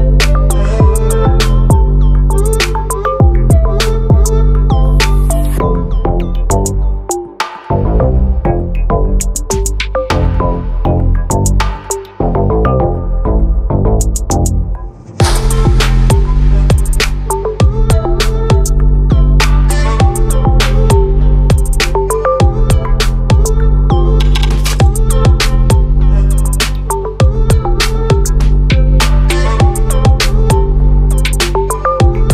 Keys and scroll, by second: 12.7 ctrl+d, 17.9 ctrl+t, 22.9 ctrl+0.